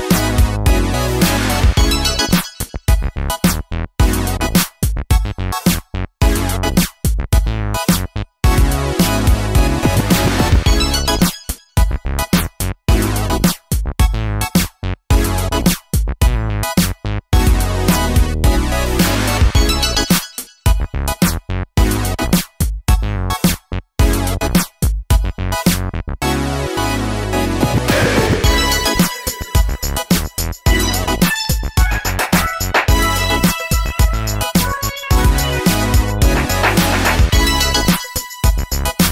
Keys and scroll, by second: 0.0-0.5 typing, 4.4-7.9 typing, 11.9 super+c, 12.1 super+v, 23.1 Down, 23.4 Down, 23.6 Down, 29.1 d, 30.4 d, 32.0-33.2 typing, 34.5 typing, 34.9 Return.